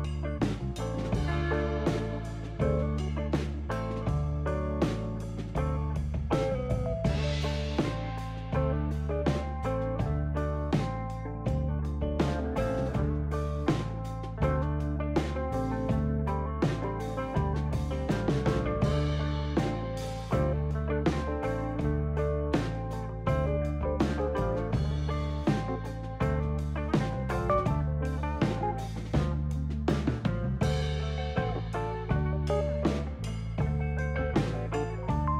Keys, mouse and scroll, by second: 1.5 shift+s, 6.3 shift+s, 7.3 shift+s, 8.5 shift+s, 9.9 shift+s, 11.1 shift+s, 12.1 shift+s, 27.7 click, 29.7 shift+s, 33.3 shift+s, 35.0 shift+s.